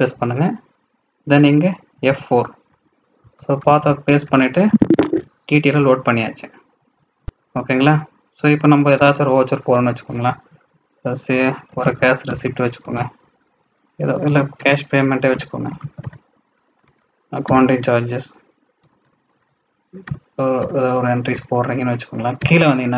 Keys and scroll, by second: 3.5 ctrl+alt+v.